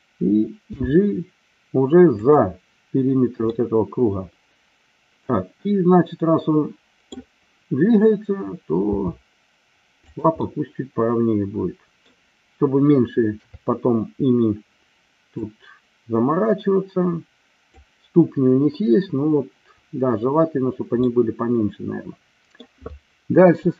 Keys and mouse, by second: 0.7 g, 2.2 click, 3.4-7.1 middle drag, 8.9 r, 10.4-12.1 middle drag, 13.4 KP_3, 15.4-17.9 drag, 21.0-22.7 middle drag.